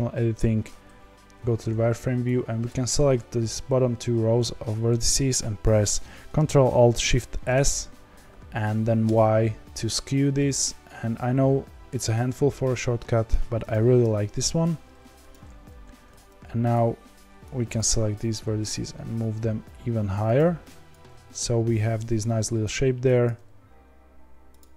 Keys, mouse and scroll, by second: 1.3 z, 2.6 click, 7.2 ctrl+alt+shift+s, 14.1 g, 15.8 2, 16.7 click, 17.1 1, 17.7 click, 18.1 g, 20.9 click, 21.0 g, 23.2 click, 23.4 g.